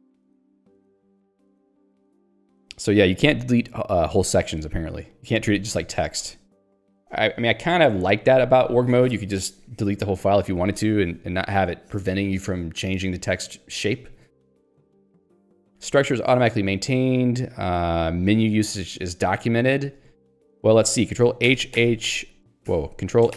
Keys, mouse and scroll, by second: 0.8 ctrl+/, 19.6 click, 19.8 click, 21.5 ctrl+h, 22.7 ctrl+g.